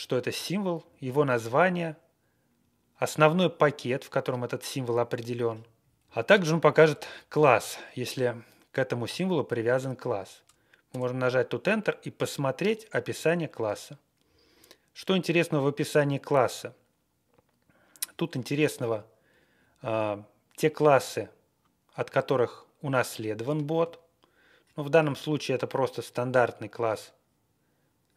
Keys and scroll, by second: 0.8 Down, 0.9 Down, 1.1 Down, 1.6 Right, 1.8 Right, 1.9 Right, 1.9 Right, 1.9 Right, 2.0 Right, 2.1 Right, 2.1 Right, 2.1 Right, 2.2 Right, 2.2 Right, 2.2 Right, 2.3 Right, 5.9 Down, 6.0 Left, 6.2 Left, 6.3 Left, 6.3 Left, 6.3 Left, 6.6 Left, 6.8 Left, 6.9 Left, 10.9 Return, 14.2 Page_Down, 14.4 Page_Down, 18.0 Page_Up, 18.7-19.1 Right, 19.2 Right.